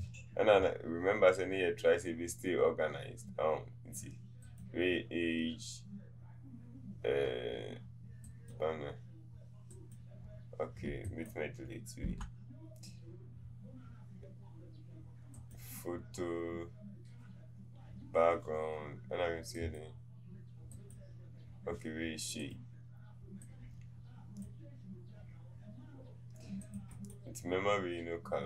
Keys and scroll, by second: 12.1 Delete.